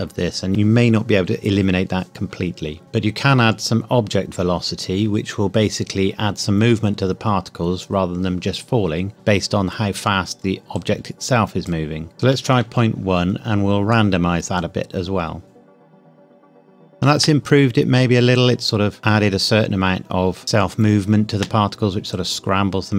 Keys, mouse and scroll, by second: 10.7 click, 12.1 KP_1, 12.2 KP_Enter, 13.9 click, 15.4 space, 17.1 space, 20.4 space, 21.2 space, 22.1 click.